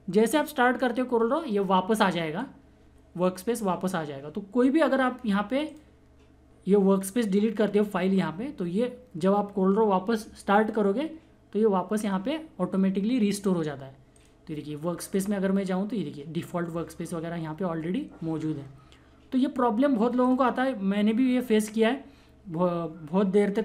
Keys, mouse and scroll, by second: 5.6 click, 14.1 click, 20.2 click, 20.2 click.